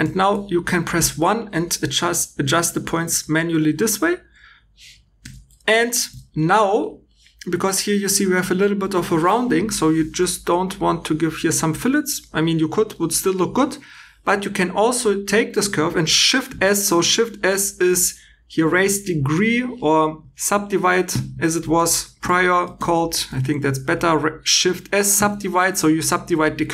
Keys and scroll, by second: 0.0 1, 0.9 g, 5.1 2, 6.0 2, 9.7 v, 10.1 b, 13.5 Escape, 25.1 shift+s.